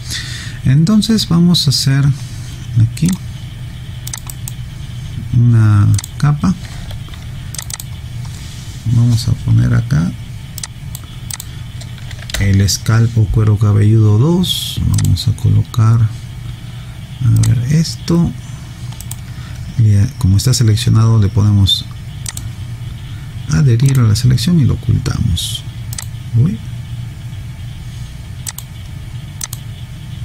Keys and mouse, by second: 3.1 click, 4.4 right click, 6.0 click, 10.6 click, 12.4 2, 15.0 click, 17.4 click, 19.0 right click, 22.3 click, 26.0 click, 28.8 click.